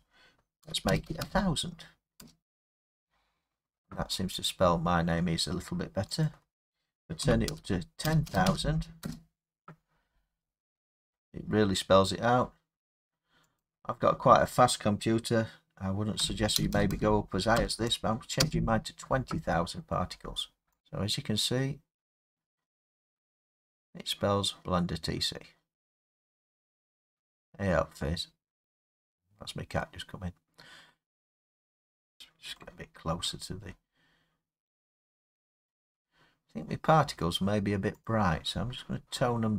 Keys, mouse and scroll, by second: 0.6 typing, 2.2 Return, 4.5 click, 4.9 typing, 6.3 click, 6.4 Return, 7.2 typing, 9.0 Return, 11.2-11.9 typing, 13.6 click, 16.2-16.6 typing, 18.4 Return, 18.7 Return, 20.8 click, 20.8 space, 33.4-33.8 scroll up 4, 33.6 middle click, 34.6 scroll down 1, 36.6 scroll down 3, 38.1 middle click, 38.1 click.